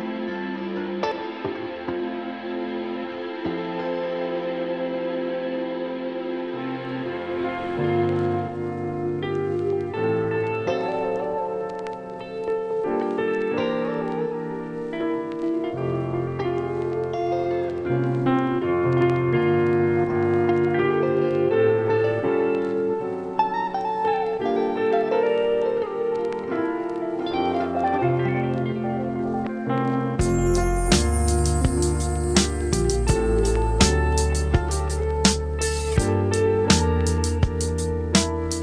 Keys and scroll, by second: 26.3 super+Tab, 33.1 Return, 33.7 super+Return, 38.1 Return.